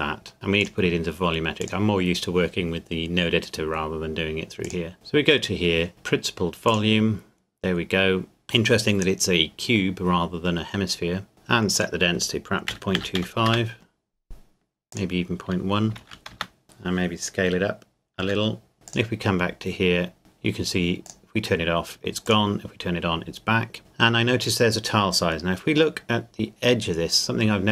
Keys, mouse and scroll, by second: 4.6 click, 6.7 click, 11.7 click, 12.7 KP_Decimal, 13.0 KP_2, 13.1 KP_5, 13.5 KP_Enter, 14.9 click, 15.9 KP_Decimal, 16.0 KP_1, 16.3 KP_Enter, 16.6 middle click, 18.2 s, 18.7 click, 25.3-25.9 scroll up 1, 26.3 middle click.